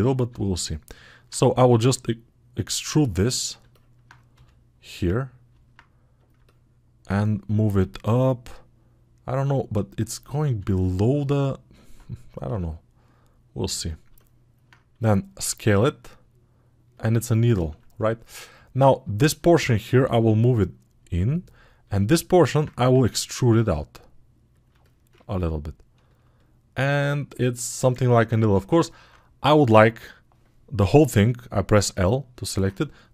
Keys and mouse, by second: 0.1-17.6 alt+middle drag, 17.6 alt+shift+click, 18.0-33.1 alt+middle drag, 19.9 g.